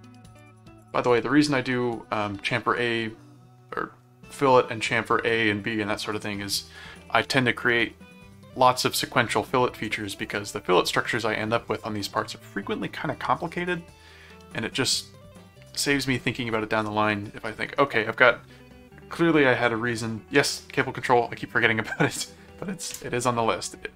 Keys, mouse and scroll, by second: 0.4 click.